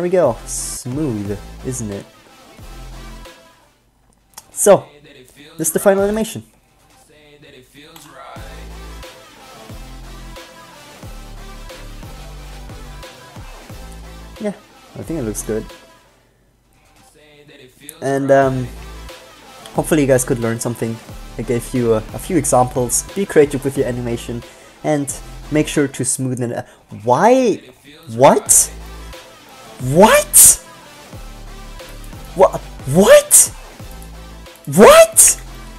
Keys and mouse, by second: 0.5 g, 3.7 middle click, 14.1-15.6 drag, 16.9 click, 26.9 click, 27.9 middle click, 32.1-34.9 right drag.